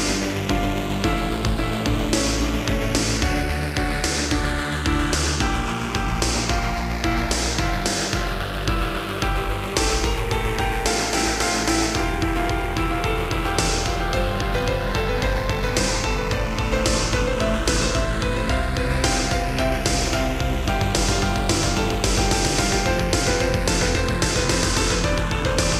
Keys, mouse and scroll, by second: 0.0 shift+middle click, 0.2 shift+middle click, 0.9 shift+middle click, 1.1 typing, 1.9 click, 2.2 middle click, 3.5 Left, 3.9 Right, 6.3 middle click, 7.1 typing, 7.6 click, 10.7 g, 11.5 click, 12.3 middle click, 12.8 ctrl+z, 13.8-14.2 typing, 15.3 typing, 15.9 click, 18.4 g, 19.0 click, 19.6 middle click, 20.7 click, 20.8 click, 21.9 middle click, 22.8 7, 24.3 g, 25.4 click.